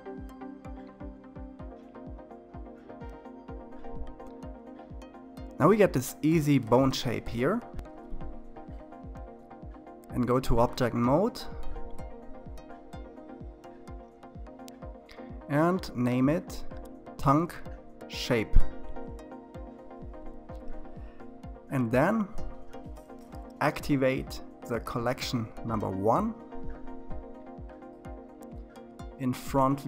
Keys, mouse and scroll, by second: 0.8-1.9 scroll down 4, 1.9-10.6 middle drag, 10.6-20.8 drag, 25.7 click, 25.9-26.7 scroll up 2, 27.5 KP_1.